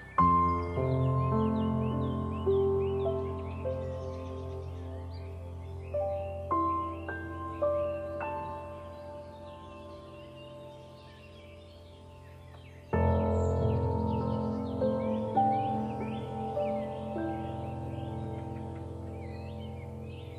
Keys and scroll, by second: 9.4 ctrl+0.